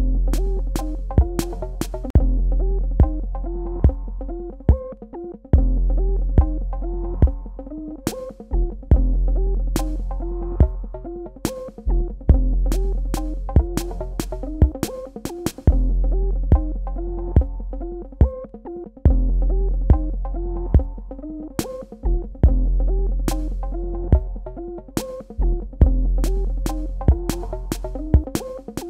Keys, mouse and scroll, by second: 3.5 click, 5.0 super+KP_Add, 7.8 KP_Subtract, 9.1 click, 11.1-11.5 scroll up 1, 11.5 scroll down 1, 11.8-12.2 scroll up 1, 12.2-16.2 scroll down 1, 16.2 click, 18.5 space, 20.1 click, 25.3 KP_Enter, 25.6 super+KP_Add, 28.1 KP_Subtract.